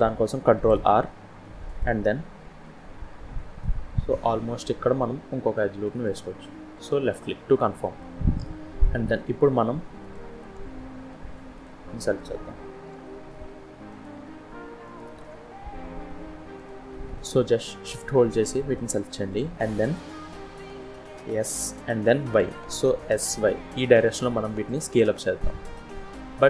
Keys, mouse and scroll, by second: 0.4 ctrl+r, 6.8 middle click, 7.9 shift+middle click, 8.3-8.8 shift+scroll up 3, 9.9 click, 11.4 click, 12.7 2, 13.7 click, 14.7 alt+click, 16.4 click, 16.9 middle click, 18.6 shift+click, 20.5 s.